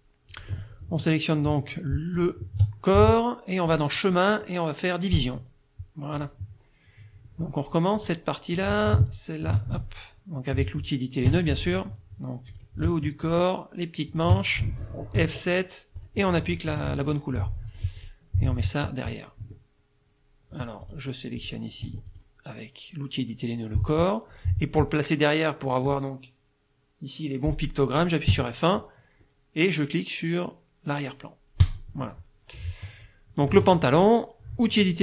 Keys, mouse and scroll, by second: 0.3 click, 2.2 shift+click, 3.7 click, 5.2 click, 6.2 click, 8.0 click, 9.1 shift+click, 11.3 F2, 11.6 click, 12.5 click, 13.2 shift+click, 14.1 shift+click, 15.2 F7, 16.0 click, 16.7 F2, 17.1 click, 17.7 click, 19.4 F1, 20.9 click, 21.4 click, 21.9 F2, 22.1 click, 28.3 F1, 31.6 click, 32.6 middle click, 33.6 F2.